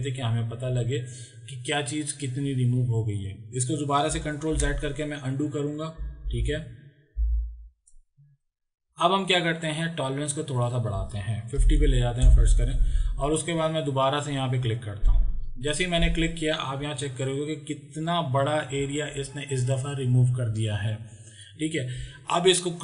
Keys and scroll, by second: 4.6 ctrl+z, 6.4 ctrl+z, 11.7 KP_5, 11.8 KP_0, 12.1 Return.